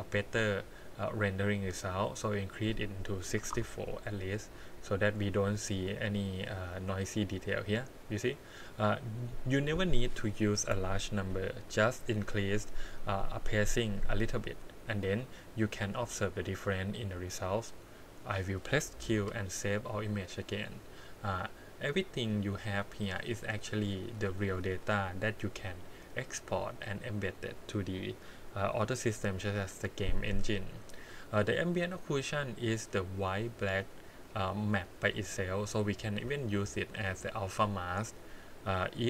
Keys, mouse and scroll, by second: 1.3-2.5 scroll down 4, 2.5-3.5 drag, 4.2-4.6 scroll up 4, 5.1 click, 8.3-9.2 scroll down 6, 14.9-19.1 scroll up 12, 19.2 q, 21.1-22.8 drag, 29.1 click, 31.2 click, 31.9 click, 35.9 scroll down 2, 36.3 middle click, 37.1 click, 37.8 click, 38.7-39.0 drag.